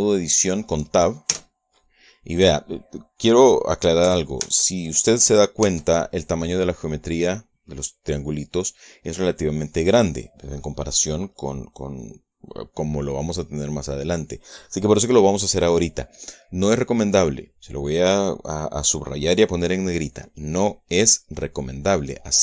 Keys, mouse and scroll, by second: 0.4-1.4 shift+middle drag, 2.0 Tab, 5.1 ctrl+Tab, 6.4 Tab.